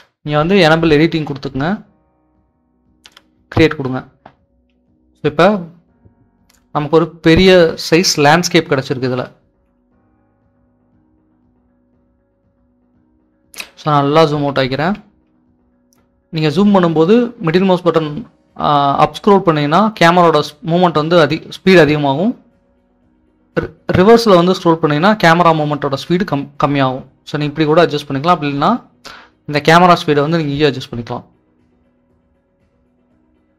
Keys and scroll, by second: 0.0 typing, 4.6-12.4 typing, 15.1-15.9 typing, 17.0-18.6 typing, 20.3-27.2 typing, 29.3-30.1 typing, 31.6-32.4 typing.